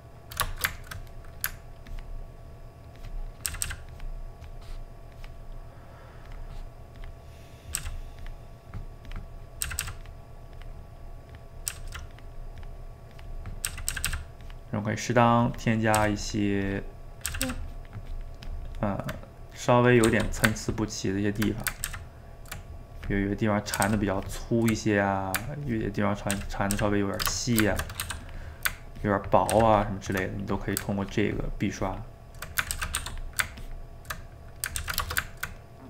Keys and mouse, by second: 1.9-3.5 ctrl+drag, 3.5 ctrl+z, 3.7 ctrl+z, 3.9-7.8 ctrl+drag, 7.8 ctrl+z, 8.2-9.7 ctrl+drag, 9.7 ctrl+z, 9.8 ctrl+z, 10.0-11.7 ctrl+drag, 11.7 ctrl+z, 11.9 ctrl+z, 12.1-13.7 ctrl+drag, 13.7 ctrl+z, 13.9 ctrl+z, 14.1 ctrl+z, 14.4-16.0 ctrl+drag, 16.0 ctrl+z, 16.2-17.3 ctrl+drag, 17.3 ctrl+z, 17.5 ctrl+z, 17.6-19.1 ctrl+drag, 19.1 ctrl+middle click, 20.1 f, 20.6 ctrl+click, 21.5 middle click, 21.9 ctrl+z, 22.4 ctrl+middle click, 23.0 click, 23.4 middle click, 23.9 ctrl+z, 24.2 ctrl+click, 24.8 middle click, 25.7 ctrl+click, 26.3 ctrl+z, 26.8 ctrl+z, 27.4 shift+right click, 27.7 ctrl+middle click, 28.0 f, 29.0 ctrl+click, 29.5 ctrl+z, 29.8 ctrl+click, 30.3 middle click, 31.0-32.5 ctrl+drag, 32.5 middle click, 32.8 ctrl+z, 33.0 f, 33.6 ctrl+click, 34.2 middle click, 34.8 ctrl+z, 35.0-35.8 ctrl+shift+middle drag.